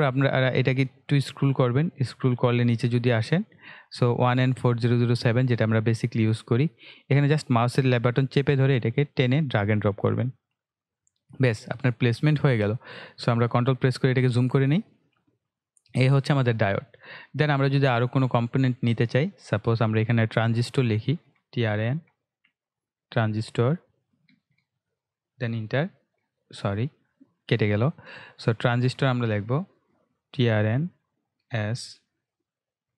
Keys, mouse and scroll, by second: 1.9-4.2 scroll down 1, 4.2-5.1 scroll up 1, 5.1-11.1 drag, 11.7 scroll up 1, 12.1 scroll down 1, 13.1-13.9 scroll up 2, 15.5 click, 17.9 click, 20.9-23.7 typing, 25.2 Return, 28.6-31.6 typing.